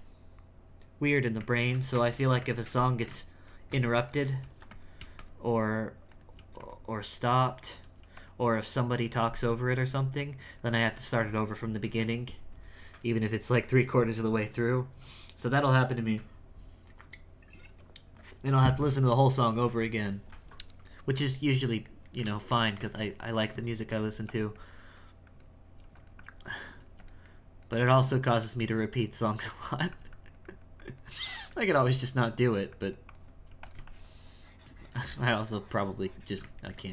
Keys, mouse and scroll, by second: 5.0 f, 5.5 click, 6.4 f, 7.1 click, 8.0 f, 8.5-9.7 drag, 10.2-13.4 drag, 21.5-24.2 shift+middle drag, 24.6-25.8 drag, 26.2 click, 27.3 click, 28.4 f, 29.0 click, 29.8 f, 30.1-31.4 drag, 31.9-33.5 drag, 33.9-36.7 shift+drag, 36.7-36.9 ctrl+middle drag.